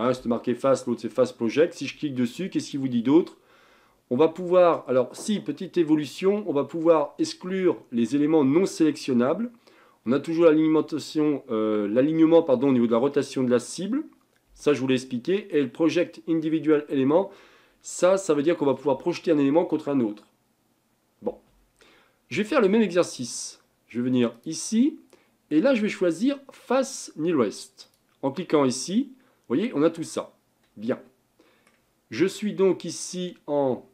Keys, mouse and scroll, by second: 21.8-22.2 scroll up 3, 24.3-27.6 drag, 30.9-33.9 middle drag.